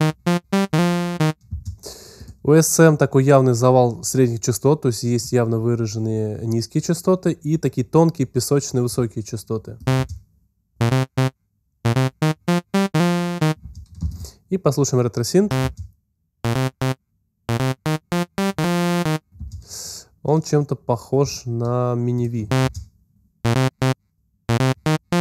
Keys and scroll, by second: 9.8 space, 13.6 space, 15.4 space, 22.4 alt+space, 23.4 space.